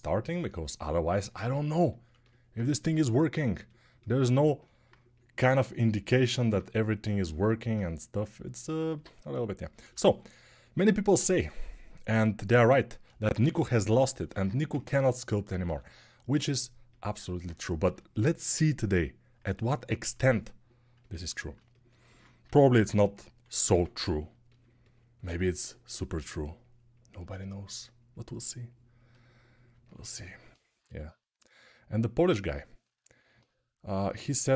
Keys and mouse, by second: 13.2 ctrl+r, 15.4 g, 17.6 6, 20.7 alt+click, 20.9 alt+click, 21.3-34.5 alt+drag, 22.2 g, 22.8 [, 23.4 1, 30.6 g.